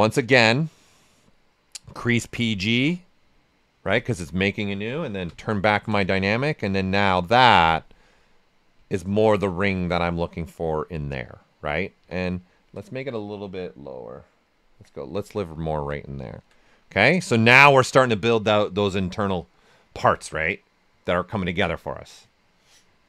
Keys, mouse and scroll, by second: 0.3-1.9 drag, 5.2 d, 5.6 shift+f, 6.0 ctrl+right click, 6.3 right click, 7.6 click, 8.8-12.0 ctrl+right drag, 12.0 w, 12.3 ctrl+right click, 13.1-14.7 drag, 14.7 q, 15.1 ctrl+right click, 16.7 right click, 17.6 alt+right click.